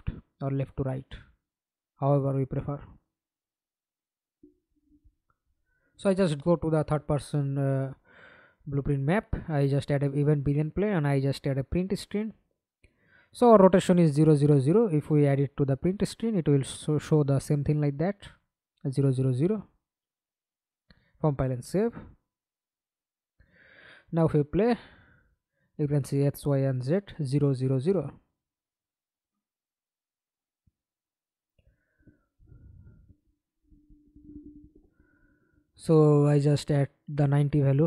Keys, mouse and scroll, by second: 2.4 scroll down 1, 2.7-3.2 scroll up 5, 3.4 right click, 4.2-6.8 typing, 6.8 Return, 7.6 scroll up 1, 7.8-8.6 scroll down 1, 8.7 double click, 11.2-12.3 typing, 13.0 Return, 21.3 double click, 21.8 double click, 23.0 middle click, 23.1 F11, 23.5 alt+p, 26.4 Escape, 27.4 alt+p, 28.3 Escape, 28.7 middle click, 29.4 F11, 31.1-32.3 scroll down 5, 35.3 9, 36.1 0, 36.6 Return.